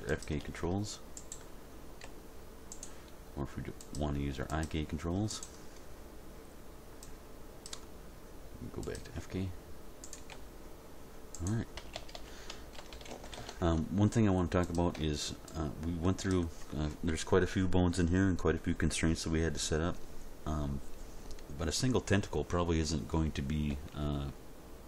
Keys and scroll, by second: 2.0 r, 10.3 r, 11.9 a, 12.8 alt+r, 13.1 alt+g, 13.4 alt+s, 23.7 End.